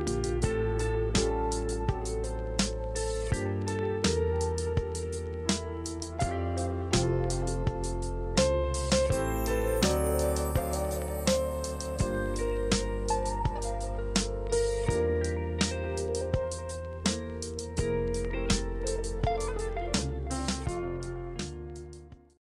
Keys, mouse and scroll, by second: 0.6 f, 3.1 click, 4.2 click, 5.2 click, 9.1 click, 13.4 click, 14.8 click, 16.8 click, 17.3 click, 21.4 click, 21.6 middle click, 21.7-22.4 scroll.